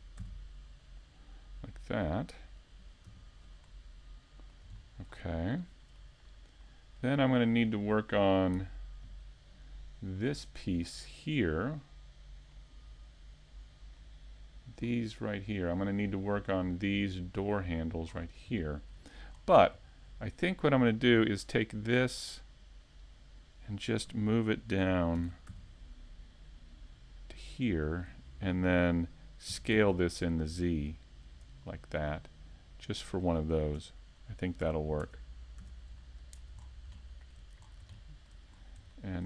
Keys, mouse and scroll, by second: 0.4 z, 0.6-1.0 scroll down 2, 1.0 shift+middle click, 5.2 click, 6.2 z, 6.7 a, 7.3 KP_5, 7.8-8.1 scroll down 2, 8.1 middle click, 9.0 shift+middle click, 9.4-10.1 scroll up 2, 9.7 shift+middle click, 10.6 middle click, 13.7 scroll down 1, 14.1 middle click, 14.9 shift+middle click, 16.2 middle click, 18.3 shift+a, 30.2 click, 30.9 middle click, 32.6 ctrl+KP_7, 33.6 KP_5, 34.4 z, 35.2 shift+middle click, 35.7-36.2 scroll up 2, 36.0 shift+middle click, 37.1 s.